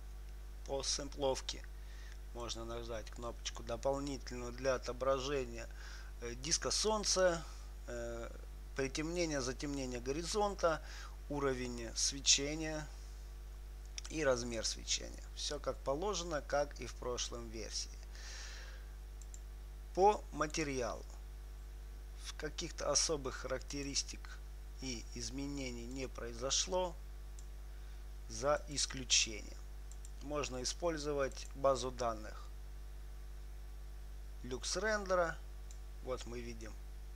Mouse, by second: 2.8-6.5 drag, 19.6-21.3 drag, 21.0-22.9 right drag, 24.1-28.0 drag, 29.0-33.8 drag, 35.2-36.9 drag.